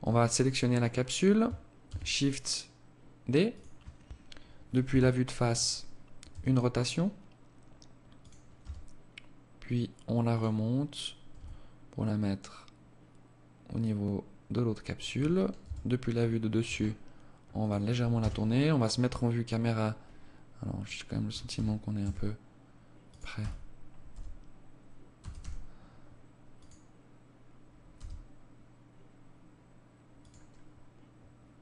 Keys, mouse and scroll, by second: 0.9 shift+d, 3.8 KP_1, 5.2 r, 7.5 g, 10.3 r, 14.5 KP_7, 15.5 r, 17.1 KP_0, 19.7 right click, 20.5 g, 22.3 g, 23.1 z, 24.1 g, 26.9 g, 31.1 right click.